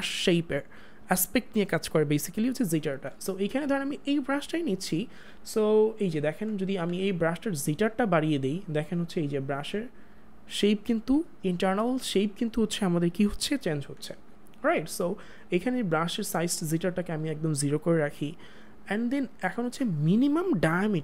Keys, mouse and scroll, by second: 4.1 click, 6.8 click, 7.7 click, 14.2 click, 14.7 ctrl+z, 16.3 click.